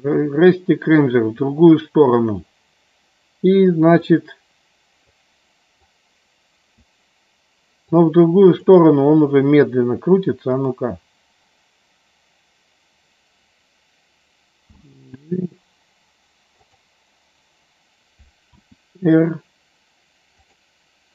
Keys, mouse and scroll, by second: 3.9-5.1 drag, 5.9 click, 7.8 click, 10.5 click.